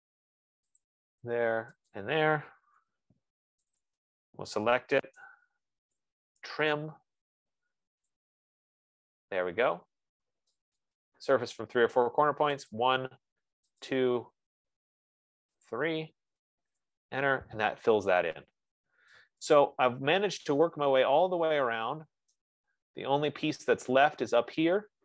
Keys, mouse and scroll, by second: 1.2 click, 2.3 click, 3.3 Return, 4.4 click, 5.5 Return, 6.1-7.0 typing, 8.5 click, 10.5-11.2 typing, 11.1 click, 13.2 click, 14.1 click, 17.0 Return, 18.7-19.4 scroll, 22.3 F15, 23.0 right click, 23.2-23.7 scroll, 24.4 scroll.